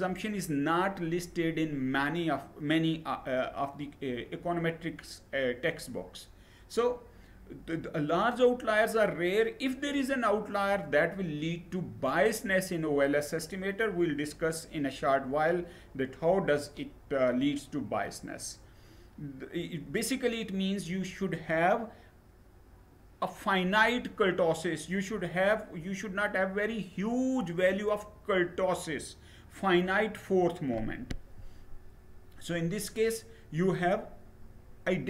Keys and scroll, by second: 30.7 Down.